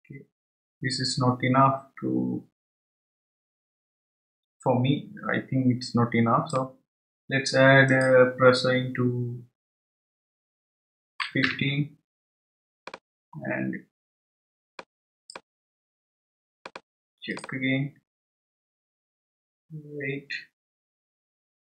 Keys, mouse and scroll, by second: 7.9-11.0 drag, 14.7-20.6 drag, 20.9-21.6 scroll up 2.